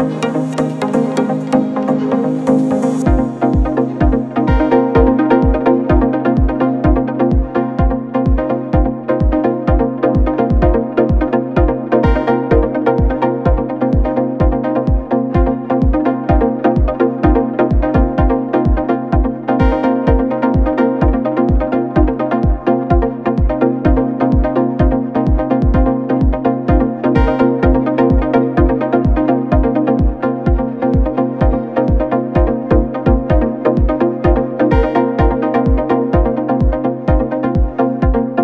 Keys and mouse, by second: 1.1 s, 2.3 s, 3.3 s, 5.1-10.1 drag, 9.7 s, 10.1-13.8 middle drag, 10.2 s, 12.2 s, 13.0 s, 13.8-18.0 drag, 17.3 s, 18.0-38.4 middle drag, 18.8 KP_1, 20.3 KP_3, 20.3 r, 21.4 g, 21.7 r, 23.2 g, 25.5 KP_1, 25.6 KP_3, 26.9 shift+d, 28.7 s, 29.9 s, 31.5 s, 32.8 s, 34.9 KP_1, 34.9 KP_3, 35.6 g, 36.5 r.